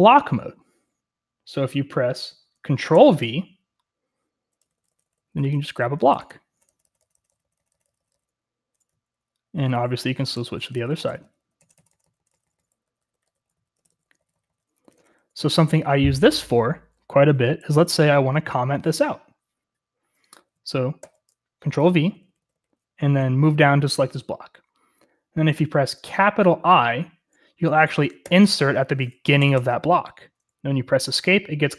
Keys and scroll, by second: 3.0 ctrl+v, 4.7-18.8 typing, 21.0 ctrl+v, 21.9-23.6 typing, 30.1-30.9 typing.